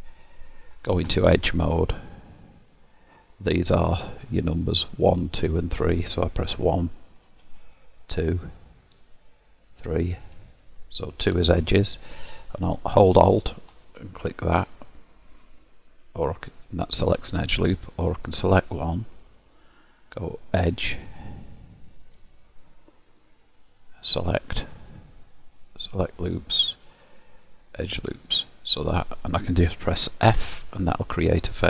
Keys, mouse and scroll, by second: 2.2 click, 7.3 1, 9.0 2, 10.2 3, 11.4 2, 13.7 alt+click, 17.7 click, 20.5 click, 30.3 f, 31.3 middle click.